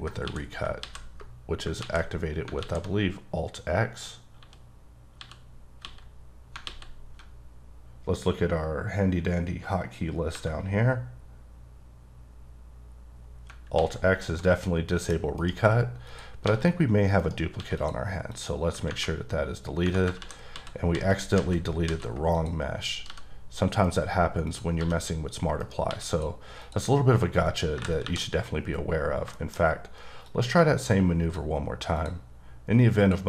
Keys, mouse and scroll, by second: 0.2 x, 0.8 ctrl+x, 5.2 x, 5.8 x, 6.6 x, 10.3 Tab, 13.5 Tab, 13.7 alt+x, 14.6 middle click, 15.2 scroll up 1, 15.4 right click, 16.1 click, 16.5 g, 17.2 right click, 17.6 x, 17.8 click, 18.3 click, 18.6 scroll down 2, 19.6 scroll up 1, 20.2 ctrl+z, 20.5 ctrl+z, 20.9 ctrl+z, 21.4 ctrl+z, 21.9 ctrl+z, 22.4 click, 23.1 g, 23.8 right click, 24.5 click, 24.8 g, 25.6 right click, 25.9 x, 26.1 click, 26.6 click, 27.7 KP_2, 28.0 KP_1, 28.7-29.3 scroll up 2, 29.3 shift+scroll up 1, 29.4 shift+middle click, 30.0 scroll up 1, 30.2 click, 32.1 ctrl+click, 33.0 ctrl+double click.